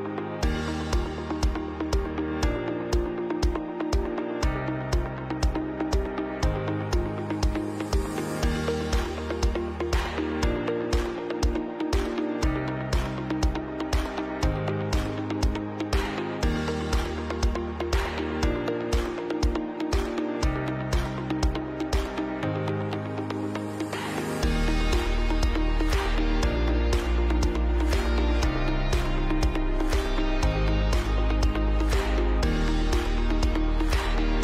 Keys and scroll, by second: 2.4 Delete, 3.3 Up, 3.7 Up, 3.7 Up, 3.8 Up, 4.6 Up, 4.7 Up, 15.9 Delete, 17.6 ctrl+alt+space, 18.3 ctrl+alt+space, 18.5 ctrl+alt+b, 18.6 ctrl+alt+space, 24.8 shift+Down, 27.6 ctrl+c, 27.8 b, 28.0 Right, 28.1 Right, 28.2 Right, 29.2 shift+Right, 30.2 ctrl+c, 30.4 b, 30.7 shift+Down, 31.1 ctrl+z, 31.3 shift+Right, 31.4 shift+Right, 31.5 shift+Right, 32.1-33.0 typing, 34.1 space.